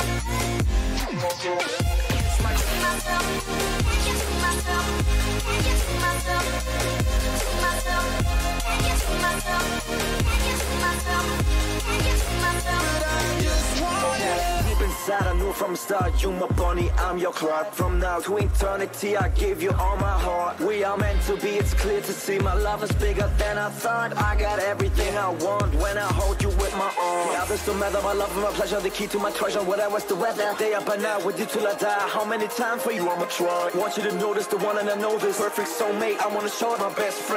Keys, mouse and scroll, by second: 3.7-7.0 middle drag, 7.9-9.9 middle drag, 8.7 a, 9.0 a, 9.9 right click, 10.8-13.5 middle drag, 13.5-15.4 drag, 13.9 middle click, 15.4 a, 15.8-17.7 right drag, 16.8-21.2 drag, 16.8 middle click, 17.9 a, 18.4-20.4 right drag, 20.7 a, 21.2-23.1 right drag, 22.1-24.6 drag, 24.0 a, 24.6-26.5 right drag, 25.4-27.2 drag, 27.3 a, 28.1-30.2 right drag, 29.1-31.1 drag, 31.5-33.5 right drag, 32.2-34.3 drag, 34.3-37.3 middle drag, 35.7 a.